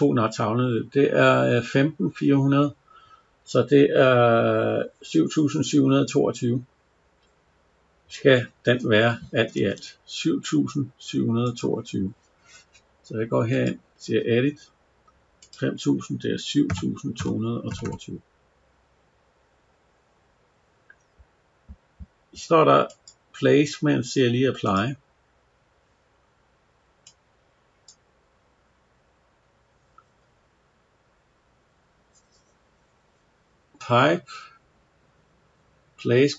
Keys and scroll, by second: 9.2 Escape.